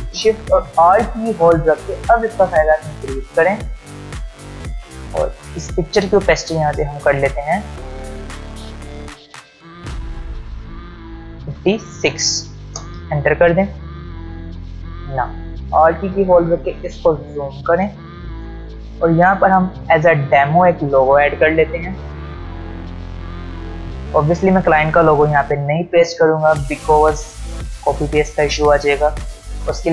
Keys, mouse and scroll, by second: 8.2 ctrl+alt+scroll up 2, 13.9-15.5 ctrl+alt+scroll down 2, 15.5-15.9 alt+scroll up 2, 15.9 space, 16.1-17.3 click, 16.4 space, 17.1 space.